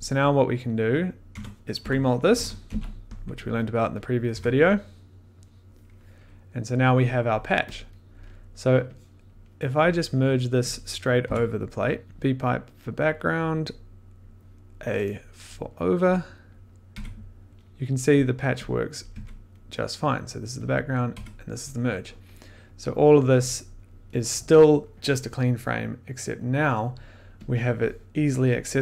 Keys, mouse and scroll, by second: 0.4 click, 1.2 Tab, 1.5-3.1 typing, 3.5 click, 4.0 click, 4.3 1, 5.4 click, 7.2 click, 7.7 click, 8.0 scroll, 9.2 click, 9.9-10.5 scroll, 10.1 click, 10.7 click, 11.2 m, 12.0 click, 13.3 click, 14.9 click, 15.6 middle click, 16.5 click, 16.9 1, 17.7 middle click, 18.2 click, 18.9 click, 19.1 1, 19.7 middle click, 20.8 click, 21.1 2, 22.5 middle click, 23.7 click, 24.2 middle click, 26.4 click, 27.1 middle click, 27.4 click, 28.1 click, 28.6 middle click.